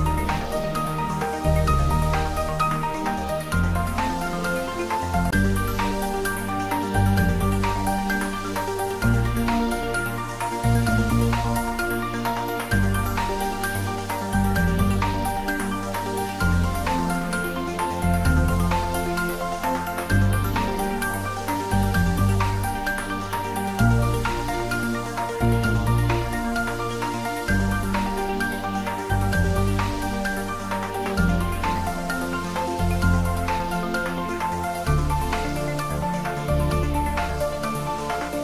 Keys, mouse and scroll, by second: 1.0 click, 5.3 click, 8.2 click, 10.5 click, 14.6 click, 25.6-28.3 scroll up 1, 28.6 scroll down 1, 29.7 click, 31.9 click, 36.8-37.1 scroll down 1.